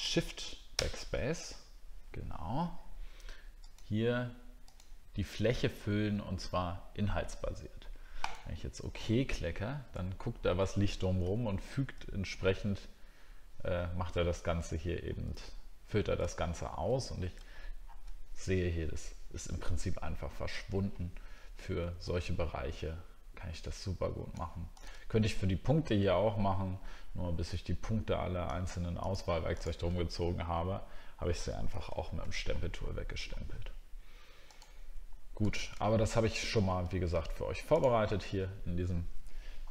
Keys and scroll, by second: 10.0 alt+scroll up 1, 17.8 alt+scroll down 1.